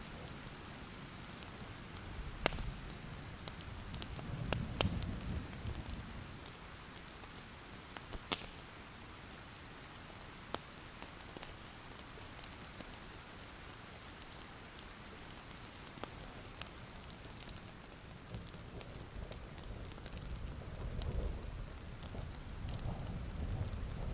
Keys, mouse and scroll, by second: 2.3 click, 2.6-3.0 alt+scroll up 1, 3.0 click, 3.6-4.1 scroll up 1, 6.6 alt+scroll up 1, 6.8-8.0 scroll down 1, 8.0 click, 8.4 alt+scroll up 1, 9.1-16.0 drag, 17.3 alt+scroll down 1, 17.5-18.3 scroll up 4, 18.7 click, 20.8 alt+scroll down 1, 21.0 click, 21.1 scroll up 1, 22.8 click, 23.6 scroll up 1, 23.8-24.1 ctrl+scroll down 2.